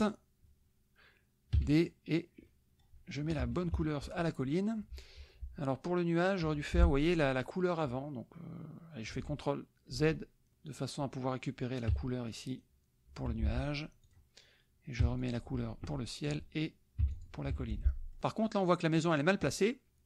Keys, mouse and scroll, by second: 0.1 click, 1.6 d, 1.7 click, 2.5 click, 3.4 F1, 3.7 KP_Subtract, 4.4 click, 6.5 F2, 6.6 click, 9.1 ctrl+z, 10.8 click, 11.9 d, 12.3 click, 13.3 F1, 14.0 click, 15.1 d, 15.2 click, 15.8 F2, 16.2 click, 17.0 d, 17.1 click, 17.6 F1, 17.8 middle click, 18.2 click.